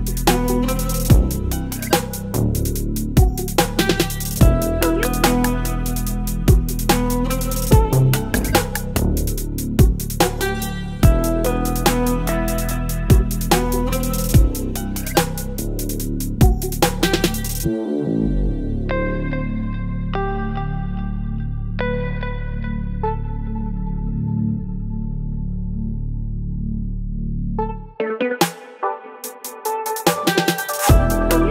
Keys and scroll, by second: 6.7 space, 11.9 space, 13.1 space, 14.0 space, 15.2 space, 17.0 space, 17.6 space, 18.6-20.1 typing, 20.3 ctrl+z, 21.5 space, 22.7-25.1 typing, 26.9 space, 28.2 space, 29.5-31.5 typing, 30.9 ctrl+z.